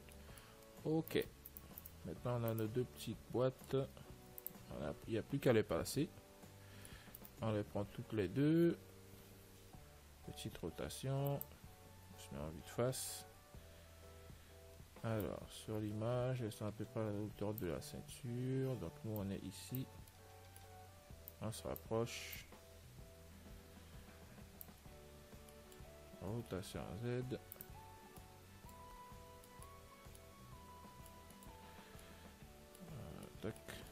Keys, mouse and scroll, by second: 1.5-7.7 middle drag, 1.5-3.9 right drag, 4.6 ctrl+s, 7.7-9.2 right drag, 10.6 r, 13.6 z, 13.9-15.5 middle drag, 15.5 click, 18.2 z, 19.5 click, 20.4-22.1 middle drag, 21.6-24.4 drag, 26.8 middle click, 26.8 r, 28.2-33.9 middle drag.